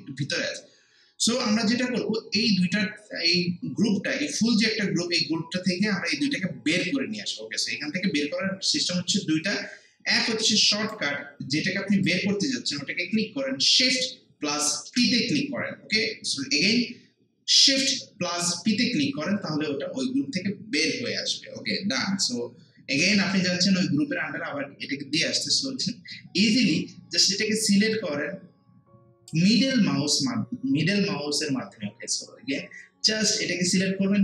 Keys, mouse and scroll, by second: 10.8 click, 14.8 shift+p, 28.2-31.6 drag.